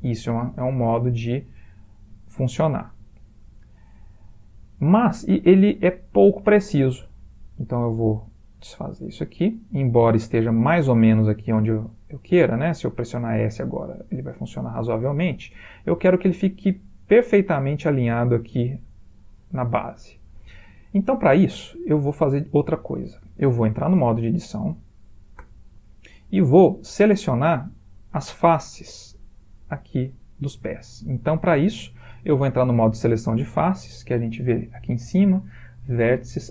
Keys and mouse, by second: 0.6 middle click, 2.9 middle click, 3.1 middle click, 3.4 middle click, 5.2 middle click, 7.6 click, 9.4-11.9 middle click, 9.6 middle click, 11.8 middle click, 12.4 s, 15.7 middle click, 17.5-19.0 middle click, 18.4 middle click, 19.2-19.6 ctrl+middle click, 19.3 ctrl+middle click, 19.5 middle click, 21.1 middle click, 21.6 middle click, 22.3-22.9 middle click, 22.6 middle click, 25.4 Tab, 36.0 click.